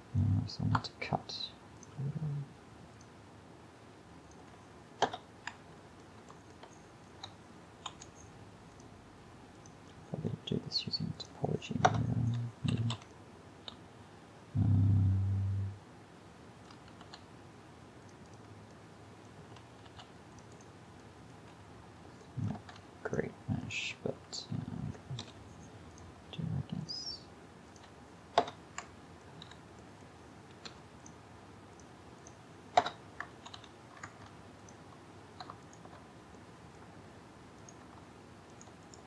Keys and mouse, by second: 0.8 k, 8.0 k, 12.8 a, 13.0 a, 13.2-15.1 middle drag, 17.1 ctrl+r, 18.8 drag, 19.9 ctrl+r, 21.4 a, 22.6 ctrl+Tab, 24.6 a, 25.3 k, 28.9-30.7 middle drag, 29.5 a, 30.7 k, 33.6 a, 34.1 ctrl+Tab.